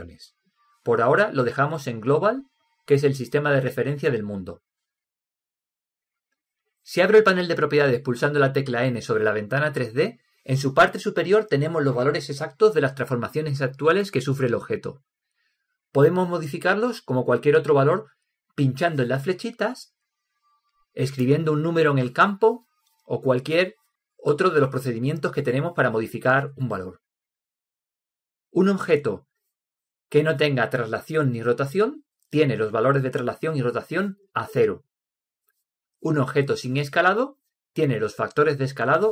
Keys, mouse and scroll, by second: 1.1 click, 10.3 n, 20.5-24.4 drag, 25.7 click.